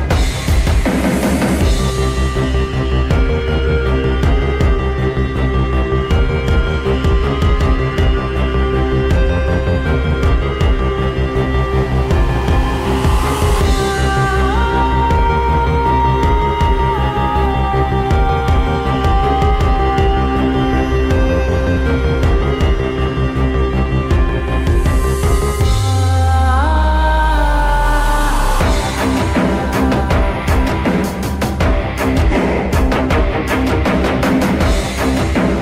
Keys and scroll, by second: 0.0-1.7 typing, 5.4-7.7 typing, 19.6 r, 20.2 w, 21.6 t, 24.0-25.7 typing, 26.8 t, 27.6 c, 35.0-35.6 typing.